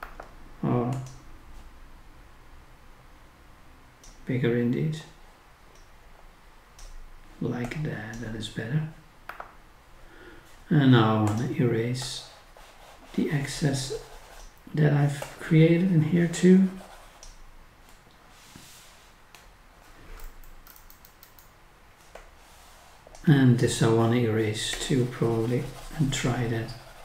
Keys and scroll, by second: 0.0 ctrl+z, 9.3 ctrl+z, 20.2 scroll up 1, 20.7 scroll down 1.